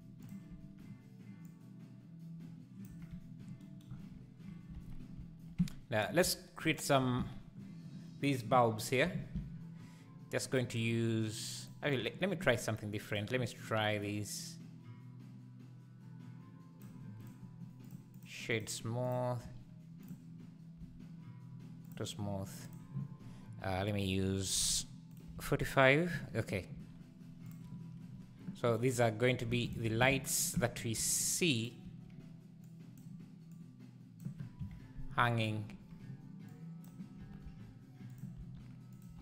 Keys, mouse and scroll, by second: 0.0 3, 0.2 click, 1.5 click, 2.9 Tab, 4.8 alt+a, 6.7-10.9 shift+right drag, 11.7 shift+a, 14.2-19.1 drag, 19.1 right click, 19.4 a, 20.1 click, 21.9 q, 25.6 click, 26.7 s, 29.7 shift+Right, 30.1 shift+s, 31.0 s, 32.6 Left, 33.5 Left, 36.5 Left, 37.2 g, 38.4 s, 39.0 g.